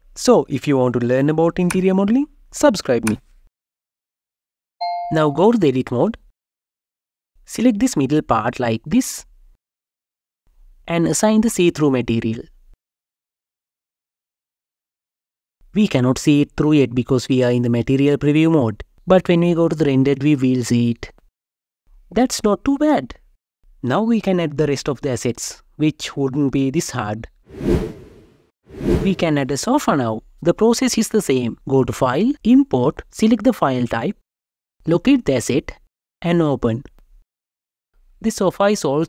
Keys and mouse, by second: 0.8 click, 1.1 click, 2.8 click, 6.8-8.0 drag, 9.2 ctrl+l, 11.3 click, 16.5 Tab, 17.9 KP_0, 28.0 click, 31.1-34.1 drag, 37.8 KP_0, 38.9 s.